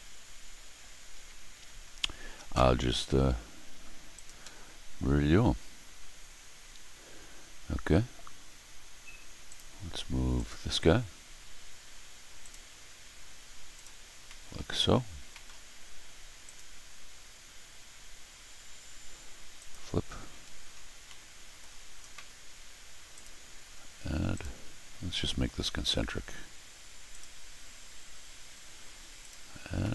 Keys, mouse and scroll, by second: 1.1 scroll up 2, 1.9 scroll down 2, 4.1 click, 4.5-7.2 scroll down 1, 7.3 scroll up 1, 9.4 click, 10.3 click, 12.4 click, 13.7 click, 14.2 middle click, 14.5 middle click, 15.3 middle click, 16.4 click, 19.5 click, 20.5-20.8 scroll down 2, 21.0 middle click, 23.1 click, 23.7 scroll up 1, 24.3 click, 27.1 click, 29.2 click, 29.8 middle click.